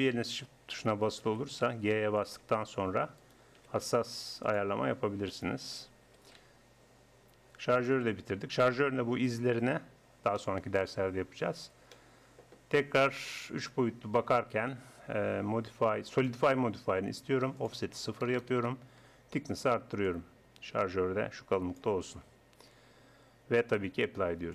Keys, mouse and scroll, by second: 1.3 g, 3.2-4.5 drag, 3.6 g, 4.5 right click, 5.3-7.0 right drag, 6.1 g, 8.1 right click, 8.4 Tab, 13.2-15.1 drag, 17.6-19.4 drag, 20.0-21.9 drag, 22.2 Tab, 23.0 Tab.